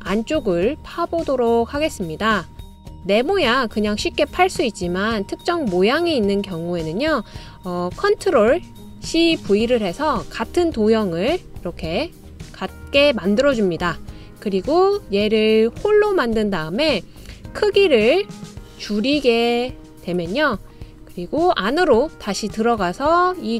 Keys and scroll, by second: 9.4 super+c, 9.8 super+v.